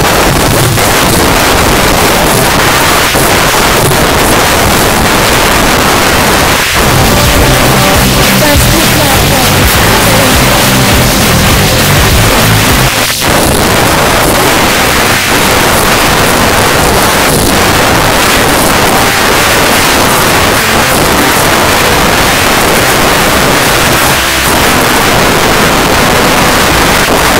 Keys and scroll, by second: 12.9 Page_Down.